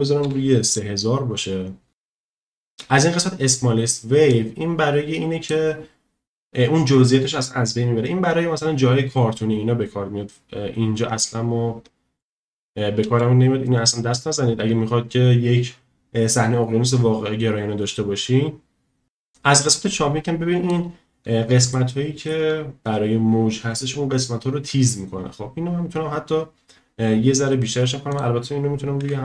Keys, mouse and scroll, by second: 1.9 ctrl+z, 4.3-5.6 drag, 13.1 ctrl+z, 19.0 ctrl+z, 19.3-20.7 drag, 21.7-22.3 shift+middle drag, 28.1-29.2 drag.